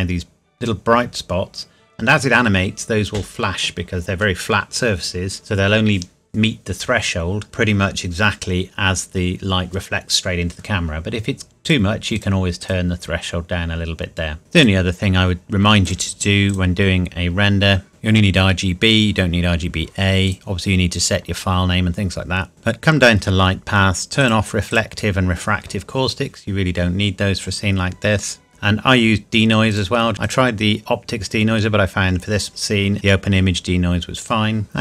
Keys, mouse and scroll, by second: 11.7 click, 14.6 click, 17.3-17.9 scroll down 1, 17.9 click, 20.3 click, 22.5 click, 22.9-24.2 scroll down 1, 24.2 click, 28.5-29.7 scroll up 1, 29.7 click, 30.2 click, 34.2 click.